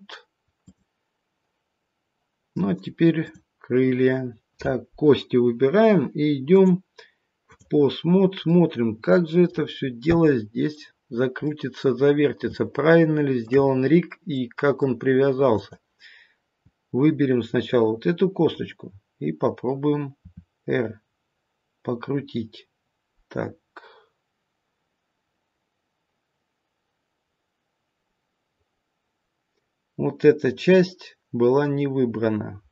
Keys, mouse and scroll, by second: 0.5 click, 6.4 click, 8.0-9.4 scroll down 3, 8.4 middle click, 10.2 middle click, 12.4 middle click, 12.5 shift+middle click, 12.5-13.4 shift+scroll up 1, 13.4 shift+middle click, 13.6-14.3 scroll up 1, 14.3 middle click, 14.3-15.5 scroll up 2, 15.5 click, 20.2 r.